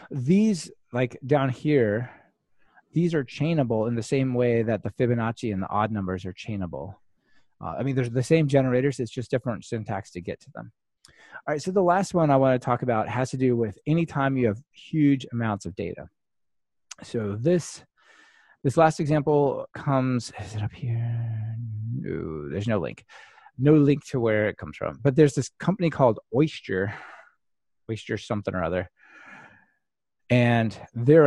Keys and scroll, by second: 25.3 ctrl+shift+r, 28.8 super+F2.